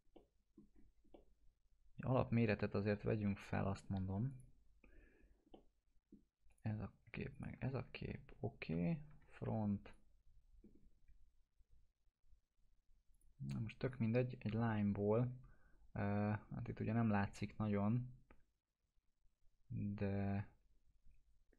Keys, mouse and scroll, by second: 0.1-0.8 middle click, 0.7 scroll down 1, 1.1-3.3 alt+middle drag, 4.3 click, 5.5-6.1 middle click, 6.5 click, 7.3 ctrl+click, 7.9 alt+q, 8.7 f, 9.9 click, 10.6 scroll up 1, 13.1 click, 14.2 scroll up 1, 18.2 scroll down 1, 19.1 scroll up 1.